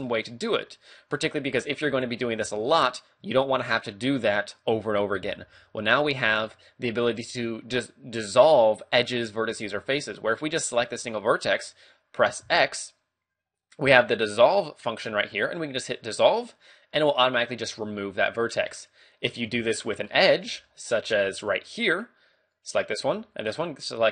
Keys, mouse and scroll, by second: 0.1 middle click, 1.7 right click, 1.9 g, 2.7 right click, 3.2 a, 11.0 right click, 12.5 x, 18.7 middle click, 19.6 shift+middle click, 20.1 scroll down 1, 20.7 shift+middle click, 22.6 right click, 23.4 shift+right click.